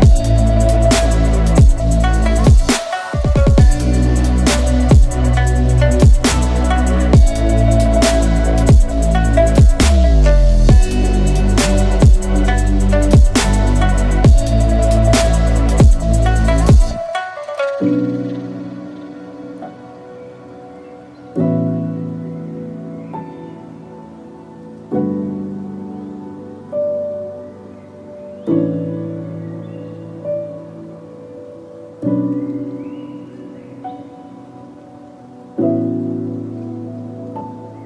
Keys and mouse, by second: 3.6-10.0 middle drag, 10.6-14.5 middle drag.